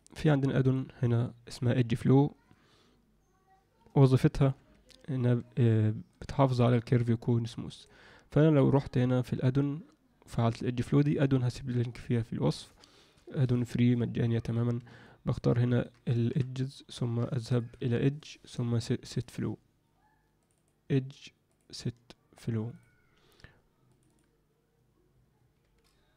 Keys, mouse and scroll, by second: 0.7-4.6 drag, 5.7 ctrl+middle click, 6.3 ctrl+alt+middle drag, 7.8-8.9 drag, 15.0-15.3 ctrl+alt+middle drag, 15.6 ctrl+alt+middle click, 16.3 KP_Decimal, 17.3 ctrl+alt+middle click, 17.5 ctrl+alt+middle click, 18.3-19.2 drag, 20.4 click, 20.5 click, 21.5-22.8 drag, 23.9 click, 24.0 click, 25.6 g.